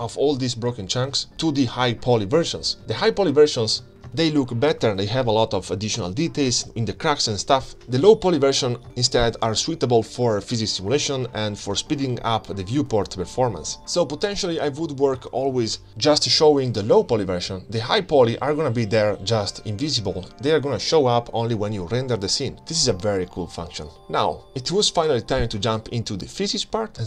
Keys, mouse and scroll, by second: 0.4-1.9 drag, 4.1 g, 8.2 ctrl+space, 9.4 click, 10.1-11.8 drag, 11.8-15.6 middle drag, 15.6 click, 16.0-16.5 middle drag, 16.5-17.0 scroll down 2, 16.8-18.5 middle drag, 19.6 click, 22.0 KP_Divide, 23.1-23.8 scroll down 2, 24.8-27.0 drag.